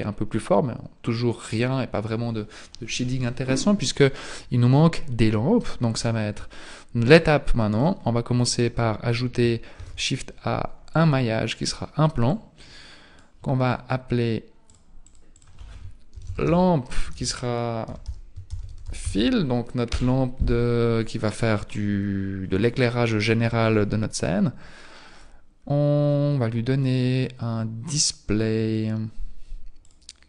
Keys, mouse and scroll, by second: 7.0 click, 8.7-9.8 scroll up 4, 9.8-10.3 scroll up 1, 9.8 shift+a, 12.3 click, 14.7 click, 15.0 click, 15.4 click, 17.2 BackSpace, 19.2 l, 26.8-29.7 scroll down 1, 29.7 scroll down 3, 29.8 click.